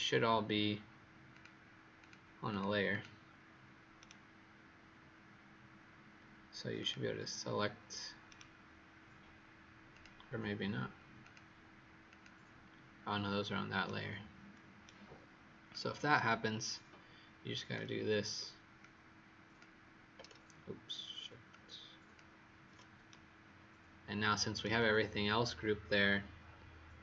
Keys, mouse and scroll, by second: 1.9 click, 2.4 click, 2.8 click, 3.9 right click, 6.7 click, 8.2 right click, 9.9 click, 13.8 right click, 15.6 click.